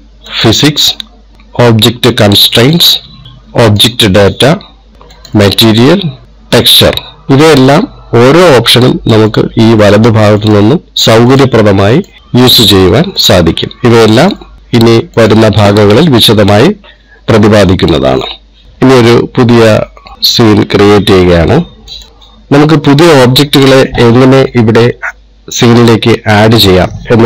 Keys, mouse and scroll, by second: 1.0 click, 3.2 click, 4.4 click, 5.8 click, 6.2 click, 9.0 click, 9.5 click, 9.9 click, 10.5 click, 11.1 click, 12.0 click, 12.2 click, 12.5 click, 13.3 click, 13.9 click, 14.6 click, 15.9 click, 20.1 click.